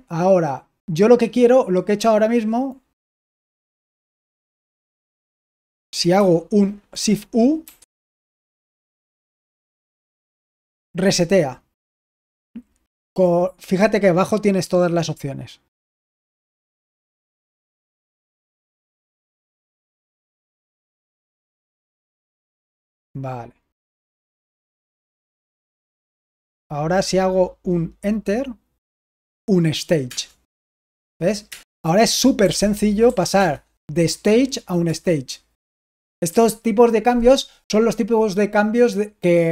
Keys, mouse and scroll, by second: 7.6 u, 9.1 Escape, 16.1 typing, 17.5-22.1 typing, 23.9-26.3 typing, 30.0 Return, 31.4 Return, 32.3-33.3 typing, 34.7 Return, 35.5 j, 36.2 j.